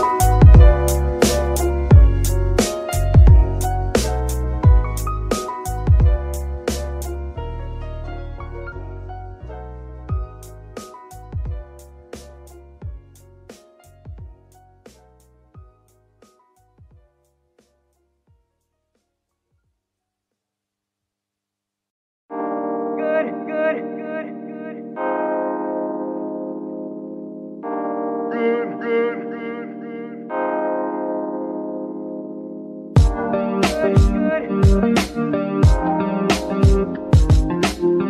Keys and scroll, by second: 1.1 Escape, 5.7 alt+g, 6.0 alt+r, 7.1 alt+r, 20.1 g, 20.2 y, 22.7 shift+z, 23.8 g, 23.9 y, 26.9 Escape, 27.5 z, 32.4 d, 36.1 shift+s.